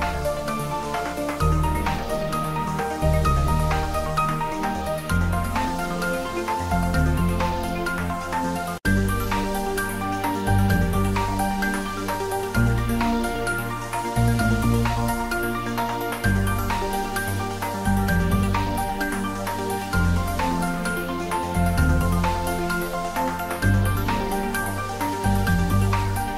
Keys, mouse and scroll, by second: 0.0 ctrl+middle click, 0.5 shift+middle click, 1.1 r, 2.8 click, 3.5 s, 4.2 click, 5.4 shift+middle click, 6.4-7.7 ctrl+middle drag, 7.7 click, 8.3-9.2 typing, 9.9 click, 10.1 ctrl+middle click, 10.7 3, 12.7 g, 12.9 click, 13.1 ctrl+s, 14.4 ctrl+middle click, 15.0 shift+middle click, 15.4 click, 15.6 ctrl+middle click, 16.3 ctrl+s, 17.6-20.0 typing, 18.7 click, 20.1 Down, 20.9 click, 21.4 ctrl+s, 21.6 click, 22.1 middle click, 22.9-23.8 typing, 24.1 ctrl+middle click, 25.2 click, 25.7 shift+middle click.